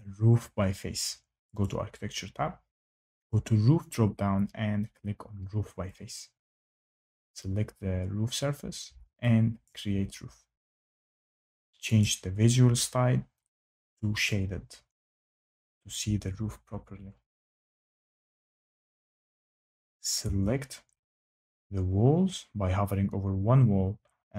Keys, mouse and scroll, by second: 1.6 click, 3.4 click, 5.8 click, 7.0 click, 9.6 click, 11.9 click, 14.2 click, 17.5 Escape, 20.1 Tab.